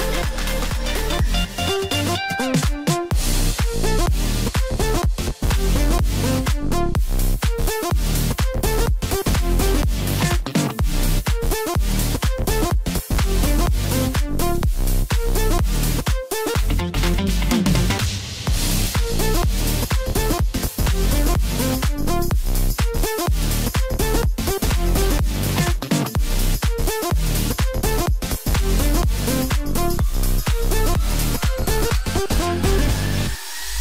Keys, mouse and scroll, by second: 0.1-1.7 drag, 2.2-4.1 drag, 4.7-7.6 drag, 8.1 KP_3, 9.7-11.3 drag, 11.6-13.6 drag, 14.2-17.0 drag, 17.6-21.2 drag, 21.8 click, 22.6 click, 23.2-24.6 drag, 24.6 Tab, 25.5-28.3 middle drag, 28.3 KP_1, 29.6 click, 31.0 click.